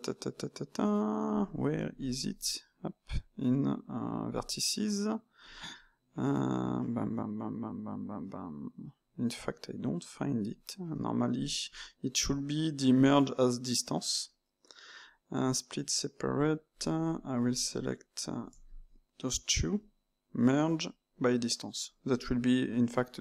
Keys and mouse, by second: 2.1 Tab, 4.3-7.3 drag, 10.9-14.0 right drag, 17.4 click, 19.0-22.2 right drag.